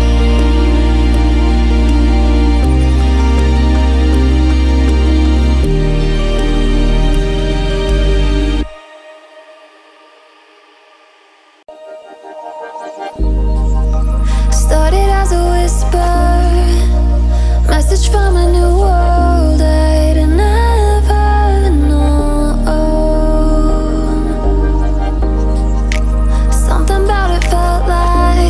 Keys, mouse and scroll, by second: 0.6 click, 5.0 click, 6.2 click, 7.0-8.8 shift+drag, 10.7 click, 12.4 alt+scroll down 1, 13.5 click, 13.9-14.4 alt+scroll down 1, 14.4 alt+scroll up 1, 14.9 click, 15.7 F7, 16.5 alt+scroll up 1, 17.1-27.4 drag, 27.4 BackSpace.